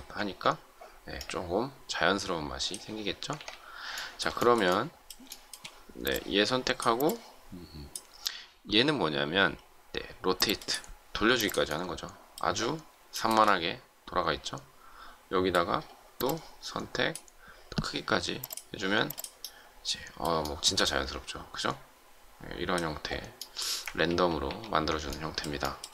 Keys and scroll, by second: 3.3 ctrl+z, 23.8 ctrl+z.